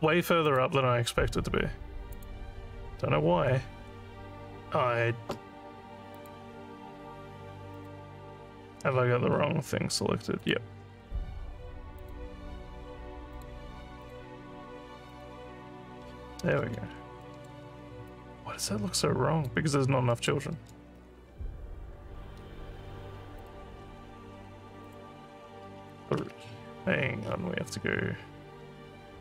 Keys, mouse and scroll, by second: 0.5 click, 2.1 click, 6.2 click, 7.7 click, 8.9 scroll, 9.0 scroll, 10.4 click, 10.9 scroll down 5, 12.0 click, 13.9 click, 15.1 click, 16.9 alt+middle click, 17.2 alt+middle click, 18.1-19.5 alt+drag, 19.7 scroll down 2, 20.1 alt+middle click, 21.0 scroll up 3, 22.4 scroll up 3, 23.4 click, 23.8 scroll down 3, 24.8 click.